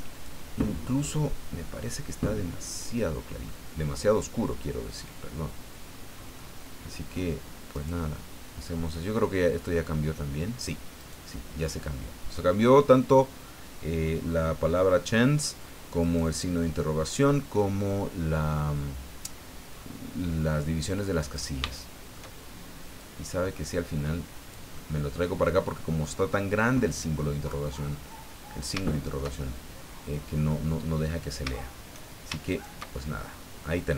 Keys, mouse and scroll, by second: 0.1 click, 1.0-1.5 scroll up 4, 3.5-6.5 middle drag, 7.7 right click, 11.0 right click, 14.1-15.6 middle drag, 16.0 right click, 21.3 shift+right click, 21.7 shift+middle click, 23.0-24.7 drag, 24.7 middle click, 26.0-27.7 drag, 27.7 middle click, 27.8-29.3 drag, 29.7-31.2 drag, 32.5 shift+right click, 33.2 shift+scroll down 1, 33.6-33.9 drag.